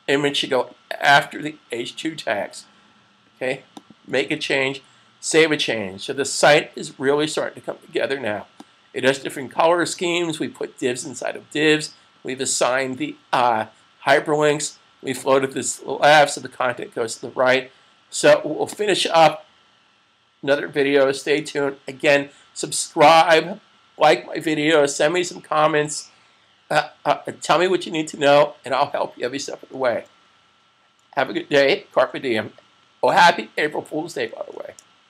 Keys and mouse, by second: 3.6 click, 5.1 super+s, 9.0 click, 18.4 click.